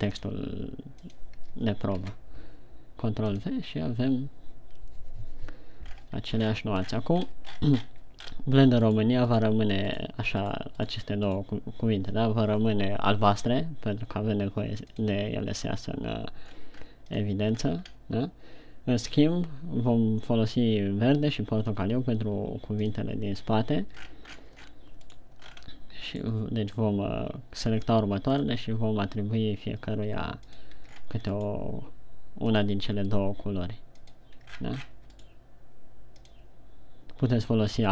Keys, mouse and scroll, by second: 0.4 click, 6.4-6.8 scroll down 3, 7.1-7.6 shift+scroll down 6, 7.6-8.8 scroll up 13, 9.6 right click, 10.0 right click, 10.4 right click, 11.0 right click, 11.5 right click, 11.8 right click, 24.4-25.4 scroll down 13, 25.5 right click, 25.9-26.2 scroll up 6, 26.7 right click, 28.6 click, 31.4-31.8 shift+scroll down 5, 31.8 right click, 32.8 click, 35.0-35.6 shift+scroll down 9, 35.6 right click, 36.6 click.